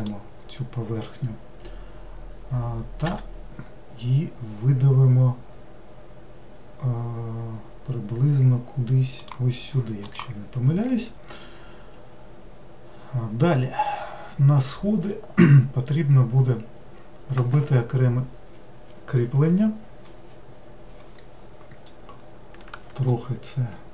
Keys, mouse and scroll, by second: 0.0 click, 3.1 e, 22.2-23.1 scroll down 1, 23.1-23.9 shift+middle drag.